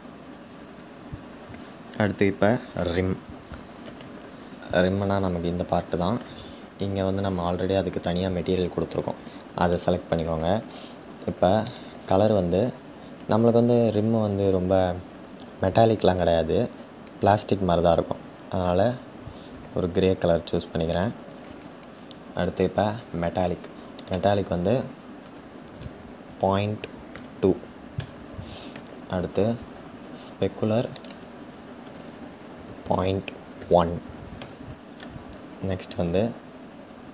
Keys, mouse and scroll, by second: 9.2 click, 27.6 click, 34.0 click.